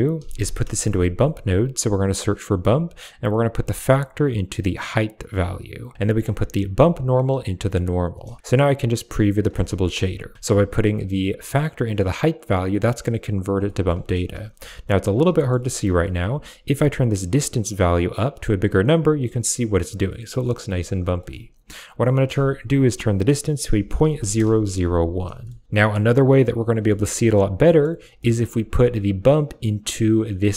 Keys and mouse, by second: 1.9 shift+a, 2.3 click, 3.4-5.2 drag, 5.7 click, 5.9 middle click, 6.8-7.9 drag, 9.0 ctrl+shift+click, 9.5 middle click, 10.3 click, 13.5 shift+middle drag, 15.2 middle click, 16.2-18.7 shift+drag, 21.1 middle click, 22.0-24.3 drag, 23.9 typing, 25.3 shift+middle click, 26.8 shift+middle drag, 27.5 middle click, 28.1 middle click, 28.9 click.